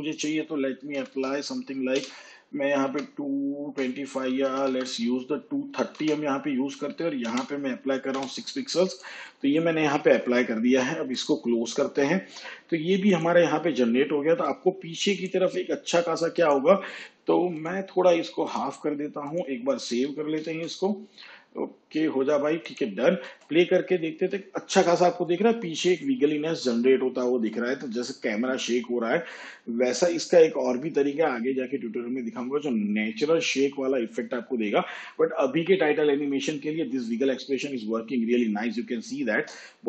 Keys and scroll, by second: 1.0 2, 2.9 BackSpace, 3.7 5, 4.5 BackSpace, 5.8 3, 6.0 0, 7.3 ,, 8.1 6, 20.1 ctrl+s, 23.3 space, 39.4 space.